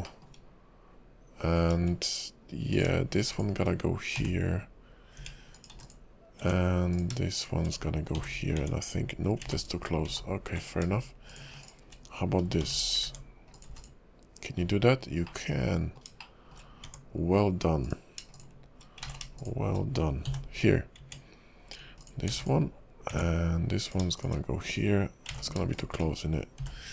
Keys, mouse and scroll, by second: 0.0 shift+middle click, 2.7 click, 3.3 shift+click, 4.3 j, 5.2 Tab, 5.5 click, 5.7 x, 6.4 Tab, 6.9 click, 7.4 shift+click, 8.3 j, 8.5 Tab, 9.6 ctrl+z, 10.2 ctrl+z, 11.3 shift+click, 11.6 shift+click, 12.7 j, 13.0 Tab, 13.5 click, 13.7 x, 14.6 scroll down 2, 15.2 middle click, 16.2 shift+middle click, 16.9 Tab, 17.8 click, 18.3 shift+click, 19.2 ctrl+z, 19.4 shift+click, 20.4 j, 21.0 Tab, 22.0 click, 22.3 x, 23.1 Tab, 23.8 click, 24.2 shift+click, 25.4 ctrl+z, 25.7 shift+click, 26.7 j.